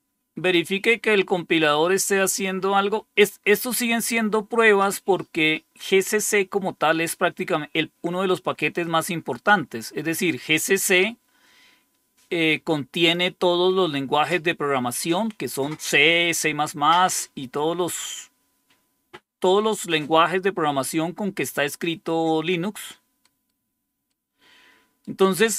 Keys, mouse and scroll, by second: 1.4 scroll down 1, 8.7-13.0 drag, 23.1 right click, 24.0 right click.